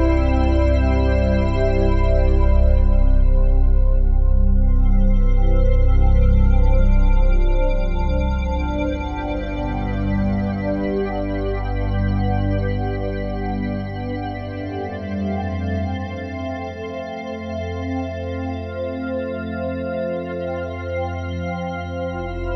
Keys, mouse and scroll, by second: 0.1-2.6 drag, 3.8 g, 8.8-11.0 drag, 11.6 ctrl+s, 13.7-14.4 alt+shift+drag, 16.5 click, 18.4 ctrl+s, 19.6 alt+shift+click.